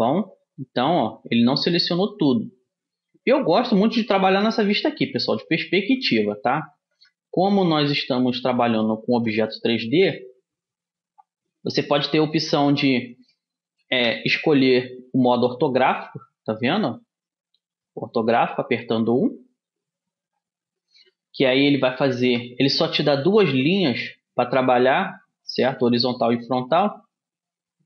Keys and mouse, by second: 3.6-5.2 middle drag, 5.6 middle click, 7.0 KP_1, 9.2 a, 13.4-17.2 middle drag, 14.0 KP_1, 19.2 KP_1, 22.4 b, 25.8-27.8 middle drag.